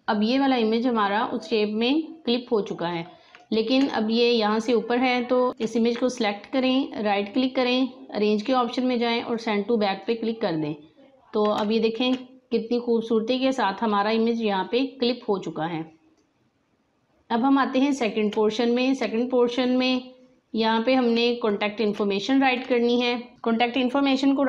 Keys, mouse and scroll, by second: 3.2 space, 3.3-6.5 drag, 6.5 right click, 9.2 click, 11.1 alt+scroll down 1, 11.6 space, 11.6-15.7 drag, 15.7 space, 16.1 click, 16.2 space, 21.1 space, 21.4 click, 21.6 space, 22.6 click, 23.1 space.